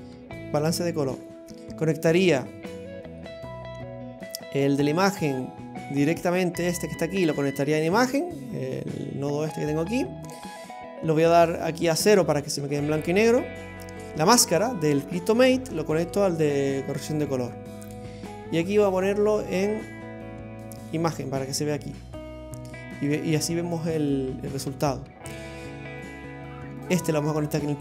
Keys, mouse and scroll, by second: 1.5 middle click, 1.5-2.0 scroll down 2, 2.1 click, 6.2 click, 10.7 click, 14.1 click, 17.1 click, 23.1 click, 24.6 click, 26.8 click.